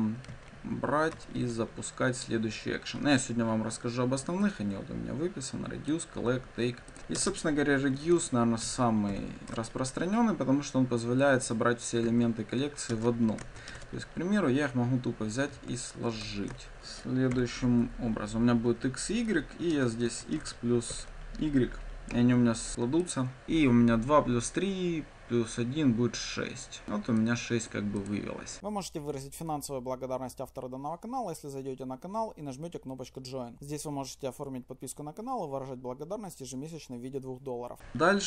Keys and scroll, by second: 1.1 Return, 7.2 ctrl+space, 9.5 Return, 37.9 ctrl+d.